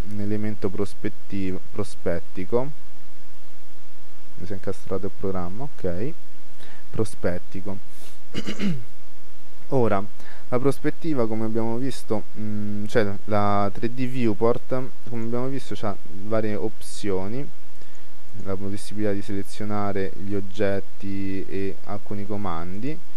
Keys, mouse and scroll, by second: 0.3-3.1 middle drag, 3.8-8.5 middle drag, 15.3-17.0 drag, 19.8 click.